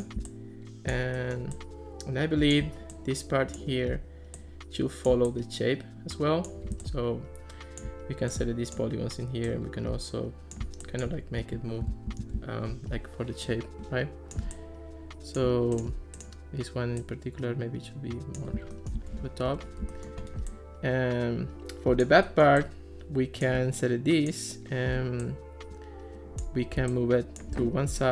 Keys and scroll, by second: 11.9 super+z, 19.5 alt+r.